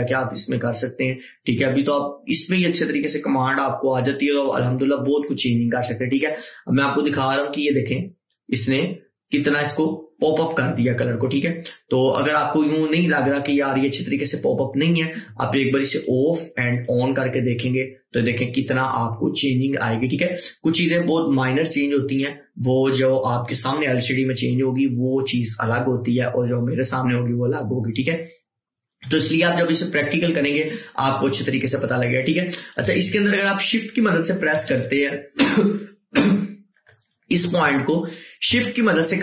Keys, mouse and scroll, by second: 16.0 click, 25.9-29.5 drag, 32.8-37.3 drag, 37.7-39.2 drag.